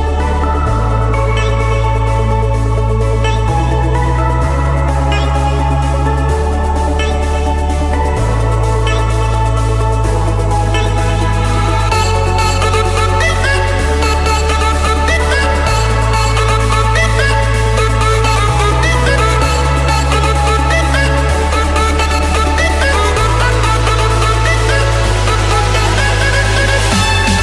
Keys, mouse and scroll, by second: 0.6 click, 0.8-1.6 scroll, 2.6 click, 2.9-3.3 scroll, 3.3 Escape, 4.0 click, 5.7 click, 6.8-8.1 scroll, 8.8 m, 9.2 Return, 11.1-12.2 drag, 12.6-13.7 typing, 13.9 Return, 14.8 click, 15.7 click, 16.6 click, 18.1 click, 19.4 scroll, 20.3 click, 21.2 click, 21.6-22.2 scroll, 22.5 click, 22.7 scroll, 23.0 Escape, 23.6 click, 26.3 click.